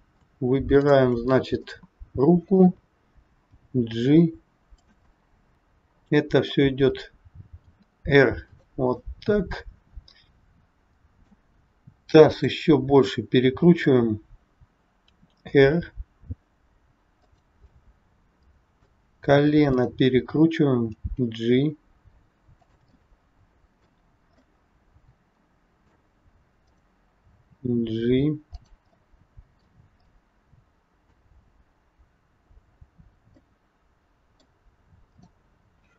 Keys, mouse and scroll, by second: 0.7 shift+click, 1.6 middle click, 3.3 g, 5.1 middle click, 9.1 middle click, 12.3 click, 13.1 middle click, 15.2 r, 17.7 middle click, 19.6 click, 20.9 g, 23.0 middle click, 26.7 click, 27.3 g, 28.9 middle click, 33.4 middle click, 34.9 click.